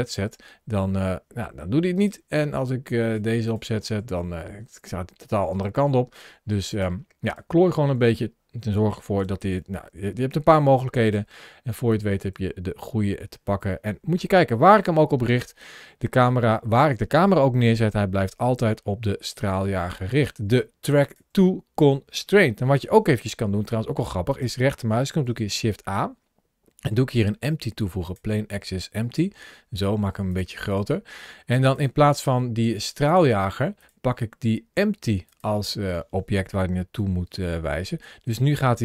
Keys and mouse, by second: 0.2 g, 1.8 right click, 2.9 click, 3.3 click, 3.8 g, 5.4 right click, 6.5 click, 7.0 click, 7.8 g, 9.2 g, 9.4 g, 10.9 right click, 11.7 click, 12.1 g, 20.8 click, 24.1 shift+right click, 25.1 shift+a, 29.0 s, 30.1 click, 32.9 click, 33.6 click, 37.3 g.